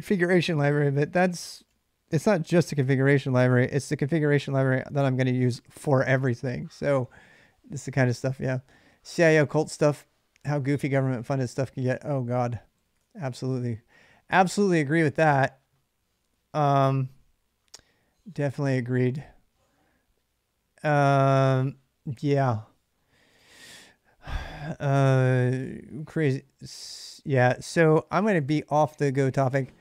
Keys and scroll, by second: 0.0-1.9 typing, 2.3 Return, 3.3 ctrl+[, 3.3 ctrl+j, 3.4-4.3 typing, 12.3-13.5 typing, 14.3 Return, 25.5-28.5 typing.